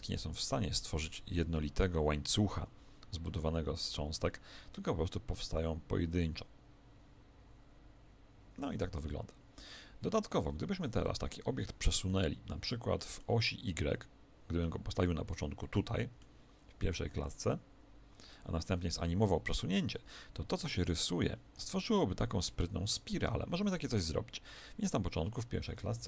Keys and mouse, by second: 10.5 Escape, 11.0-14.8 middle drag, 13.9 click, 15.6-17.3 middle drag.